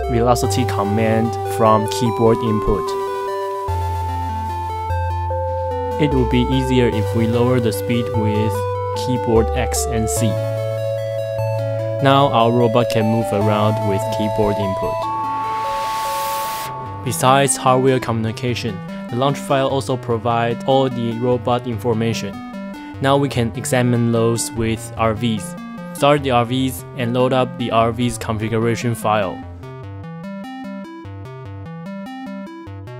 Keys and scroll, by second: 3.6 Return, 7.9-14.1 typing, 15.2 k, 21.3-23.8 typing.